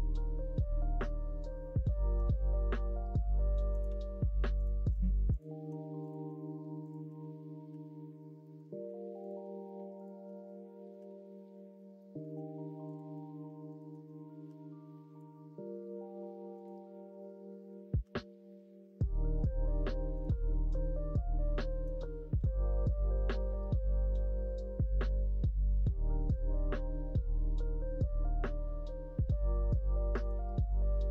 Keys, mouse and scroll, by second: 4.5 click, 5.9 click, 6.8 shift+click, 7.7 f, 8.4 middle click, 9.1 click, 9.9 shift+click, 10.9 f, 11.9 shift+middle click, 12.8 click, 13.7 shift+click, 14.4 f, 15.1-16.6 drag, 18.0 g, 20.4 click, 21.5 shift+click, 22.3 e, 26.2 click, 26.7 g, 30.1 shift+click, 30.7 shift+click.